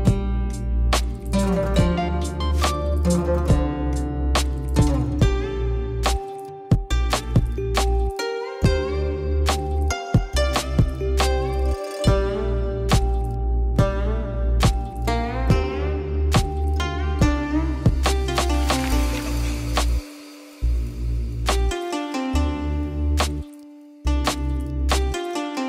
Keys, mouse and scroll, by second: 0.7 alt+shift+click, 1.4 alt+shift+click, 1.8 alt+shift+click, 2.1 middle click, 2.5-2.9 alt+shift+drag, 3.0 alt+shift+click, 3.1 middle drag, 3.6 alt+shift+drag, 3.9 alt+shift+click, 4.2 middle click, 4.9 alt+shift+click, 5.8 alt+shift+click, 5.9 alt+shift+click, 6.4 alt+shift+click, 6.7 alt+shift+click, 7.4 ctrl+alt+shift+z, 8.1 click, 8.5 alt+shift+click, 8.8 middle click, 9.5 alt+shift+click, 10.1 middle click, 10.7 alt+shift+click, 11.0 alt+shift+click, 11.6 middle click, 12.3 alt+shift+click, 12.6 alt+shift+click, 12.7 alt+shift+click, 13.3 middle click, 13.9 alt+shift+click, 14.6 alt+shift+click, 14.9 alt+shift+click, 15.6 click, 17.2 shift+click, 17.6 middle click, 18.2 click, 18.8 alt+z, 19.2 click, 19.7 s, 21.1 alt+z, 21.2 click, 22.0 shift+click, 22.5 Tab, 22.8 KP_Divide, 23.4 n, 24.0 drag, 24.3 click, 25.1 click.